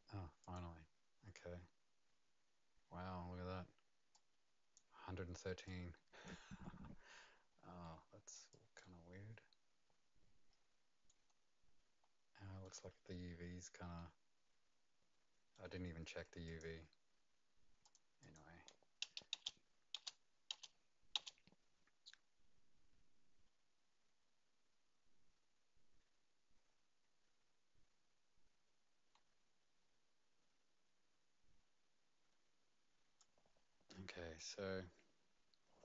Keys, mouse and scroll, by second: 0.4 click, 4.1 click, 5.6 click, 6.5-6.9 scroll up 4, 7.2 click, 7.2 scroll down 1, 7.8 right click, 8.5 click, 8.8 right click, 11.3 scroll up 2, 12.0-12.6 scroll down 1, 12.6 right click, 16.5 click, 17.8 click, 18.2 click, 19.3 space, 19.9 space, 20.5 space, 21.1 space, 34.3 click.